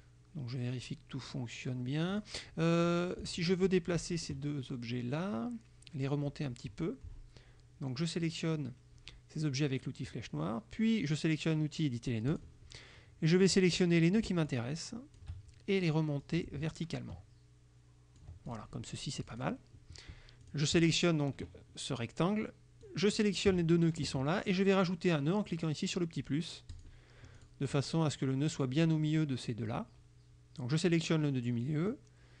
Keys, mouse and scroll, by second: 2.2 click, 3.3 shift+click, 12.4 click, 13.5 click, 14.5 shift+click, 16.3-18.4 ctrl+drag, 18.5 ctrl+click, 19.3 click, 20.5 click, 22.9 click, 26.8 click, 27.4 click, 31.9-32.4 drag.